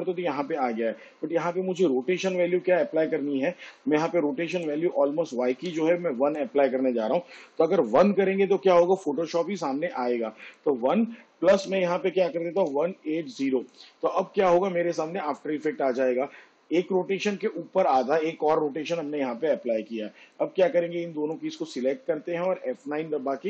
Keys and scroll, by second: 5.5 1, 11.5 1, 12.2 8, 22.2 F9.